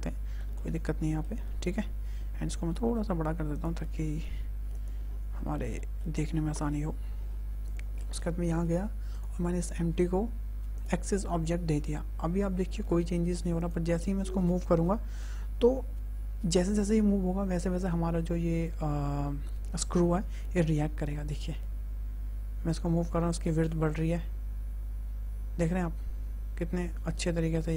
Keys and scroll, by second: 2.4 s, 4.0 ctrl+a, 20.6 g.